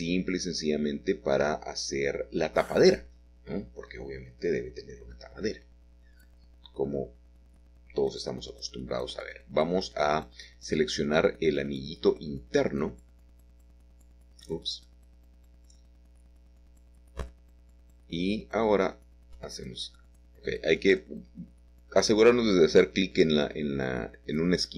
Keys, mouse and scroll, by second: 0.0 Escape, 0.5 ctrl+z, 3.5 e, 5.8 click, 9.2 click, 10.0 a, 10.1 a, 11.4 click, 11.4 typing, 13.9-14.6 typing, 14.1 click, 16.2-16.9 typing, 16.4 click, 18.6-19.2 scroll up 3, 18.6 middle click, 18.6 typing, 18.8 middle click, 19.2-20.8 shift+middle drag, 20.8 alt+shift+click, 21.7-22.9 scroll down 1, 21.9 typing, 22.9 scroll down 1, 23.5 e.